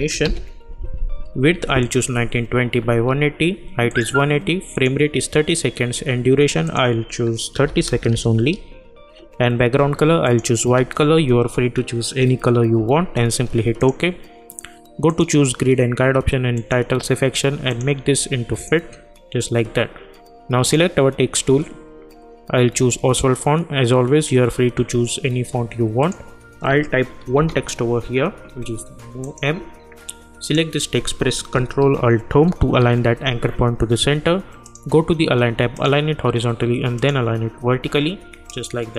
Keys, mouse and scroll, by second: 0.0-0.7 typing, 1.9 click, 7.6 Right, 10.2 click, 13.8 click, 26.0 click, 27.3 shift+m, 29.2 click, 32.5 ctrl+alt+Home, 34.6 click.